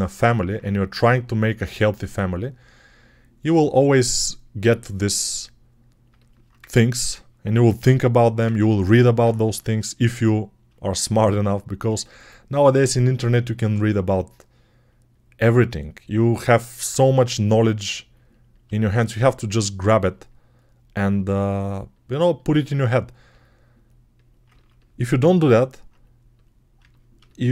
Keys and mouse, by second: 6.4 Tab, 7.4 ctrl+r, 7.4 ctrl+click, 8.0-9.8 ctrl+middle drag, 8.3 ctrl+Tab, 9.3 g, 9.8-11.7 drag, 11.7 alt+shift+right click, 19.1-27.5 drag.